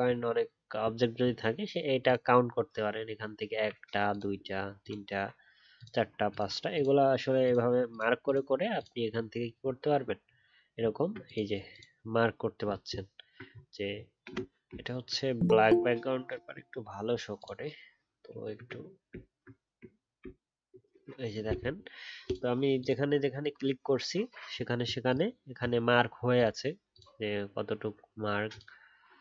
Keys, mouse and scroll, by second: 10.1 alt+scroll up 1, 12.6-15.0 alt+scroll down 1, 20.2 alt+BackSpace.